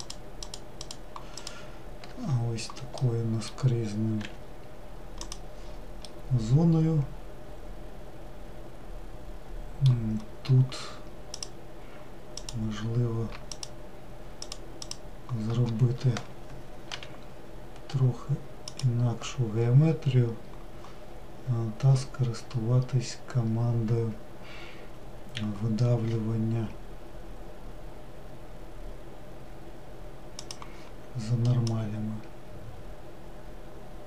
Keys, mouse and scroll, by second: 0.6 alt+click, 1.0 alt+click, 4.3 g, 6.2-9.9 middle drag, 11.5 click, 12.6 click, 13.7 shift+click, 14.7 shift+click, 17.0 i, 22.9-25.0 scroll up 1, 25.0-26.5 scroll up 1, 30.6-33.5 drag.